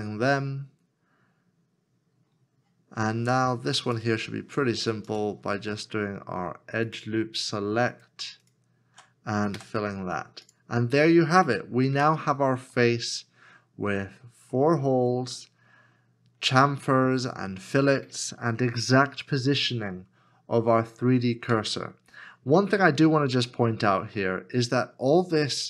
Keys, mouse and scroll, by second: 3.6 f, 3.9 alt+click, 5.1 alt+shift+click, 6.9 alt+shift+click, 7.9 alt+shift+click, 9.5 f, 11.9 f, 12.0 Tab, 12.8 middle click, 21.4 middle click, 22.7 Tab, 23.5 middle click.